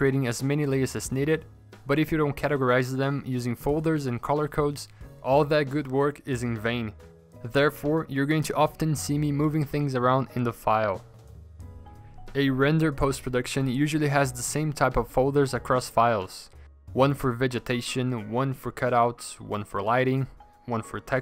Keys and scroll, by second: 0.9 p, 2.6 v, 5.0 p, 10.0 v, 19.4 ctrl+g, 19.5-20.6 typing.